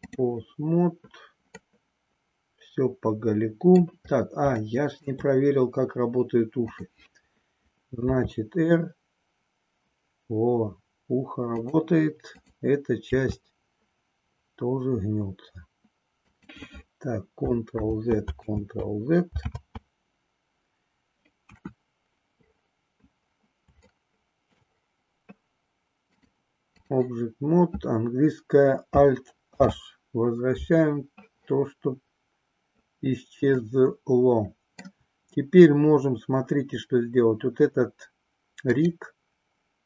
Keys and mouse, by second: 1.6-3.8 middle drag, 4.7 shift+middle click, 7.9 r, 12.3 click, 13.2 r, 18.1 ctrl+z, 18.8 ctrl+z, 21.3 KP_1, 24.1 shift+middle click, 26.1 click, 31.8 alt+h, 33.5-34.9 middle drag, 38.7 click.